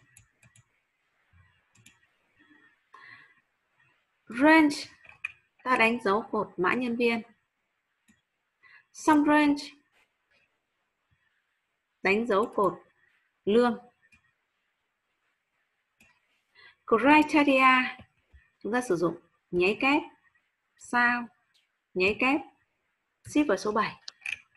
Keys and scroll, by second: 19.6 shift+'.